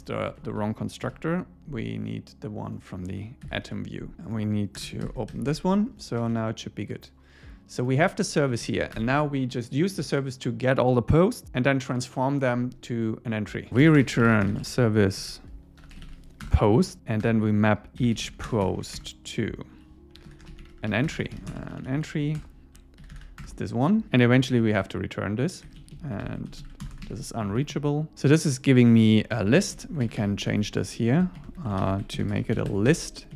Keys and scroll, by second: 0.2 shift+super+Right, 0.4 shift+Left, 1.0 super+x, 3.6 super+v, 4.1 Escape, 5.0 alt+8, 5.3 Escape, 6.2 super+s, 8.6 Up, 8.8 super+Right, 9.0 Return, 16.4 Return, 17.2 Return, 19.0 Return, 22.4 Return, 25.7 Home, 25.8 Down, 26.2 super+Right, 26.5 shift+super+Left, 27.1 super+s, 27.4 Up, 29.6 super+Right, 29.8 Left, 30.8 alt+Left, 31.4 alt+Left, 31.8 alt+shift+Right, 32.7 Escape.